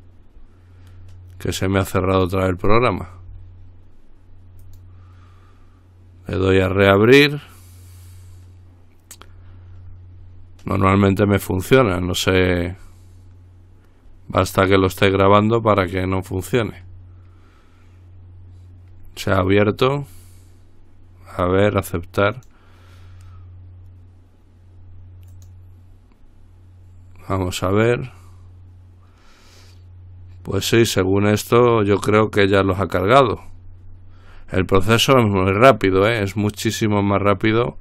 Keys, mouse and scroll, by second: 4.9 click, 16.7 click, 21.6 click, 22.6 click, 25.5 click, 28.0 click, 33.4-34.6 scroll down 2, 34.6-35.1 scroll down 1, 35.2-35.9 scroll down 1, 35.9-37.2 scroll down 2.